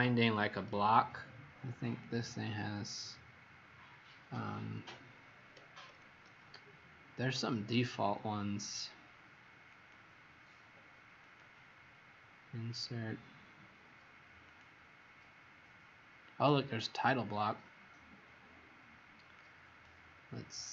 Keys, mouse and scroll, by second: 1.8 click.